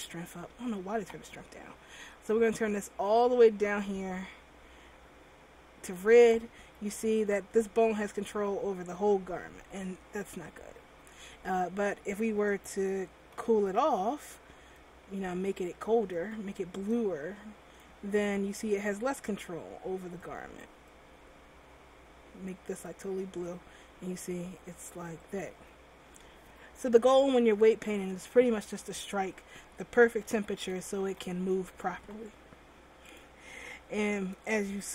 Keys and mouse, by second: 7.1 r, 10.9 a, 11.0 a, 13.4 r, 18.3 r, 23.4 r, 30.4 a, 30.8 a, 31.2 alt+r.